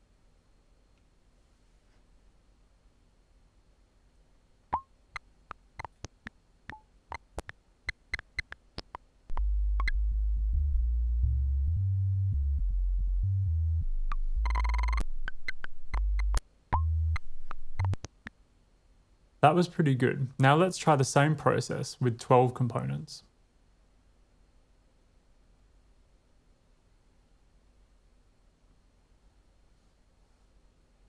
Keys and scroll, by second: 2.1 typing, 4.6 w, 4.7 space, 18.4 space, 19.6 super+z, 19.8 super+z, 20.0 super+z, 22.2 shift+super+r, 23.1 Return, 25.4-26.3 typing, 27.1 Return, 28.2-31.0 typing.